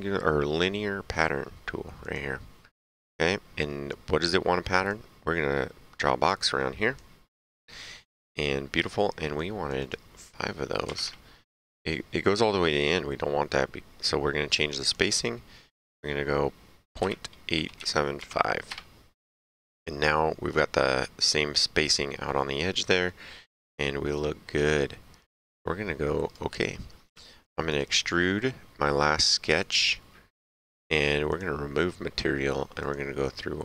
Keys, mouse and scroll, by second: 2.0 click, 4.8 click, 9.3 click, 10.8 KP_5, 11.0 KP_Enter, 14.7 click, 18.1 KP_5, 18.6 KP_Enter, 21.3 right click, 26.2 click, 27.0 s, 27.6 click, 29.6 click, 31.2 click, 32.8 click.